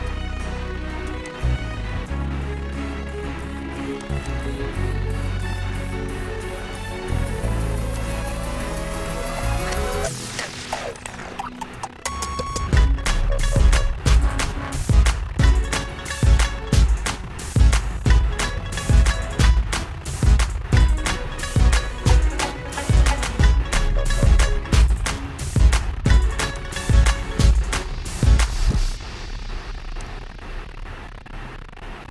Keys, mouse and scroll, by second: 1.6 click, 4.3 click, 4.5 click, 8.2 click, 22.8 click, 26.8 click, 30.4 click.